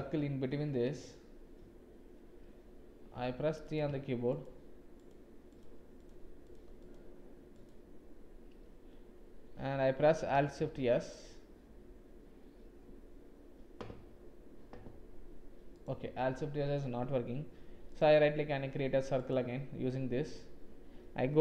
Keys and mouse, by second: 0.1 shift+click, 4.9 shift+click, 10.6 alt+shift+s.